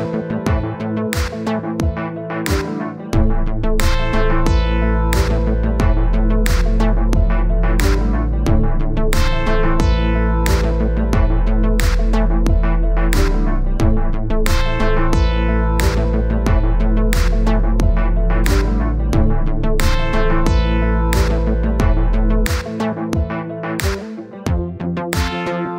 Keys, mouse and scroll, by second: 0.9 middle click, 1.7-3.2 drag, 3.2 middle click, 3.7 click, 4.2 scroll down 1, 4.2 middle click, 4.9-6.4 drag, 6.4-7.3 scroll up 1, 7.3-8.6 middle drag, 8.7-9.1 scroll down 1, 9.1-13.3 middle drag, 14.0-16.0 middle drag, 16.9 click, 17.6 click, 18.2 click, 18.8 middle click, 19.2-21.2 drag, 21.2 middle click, 21.9-22.9 drag, 22.9 middle click, 23.3-24.8 drag, 24.8 middle click, 25.5-25.7 drag.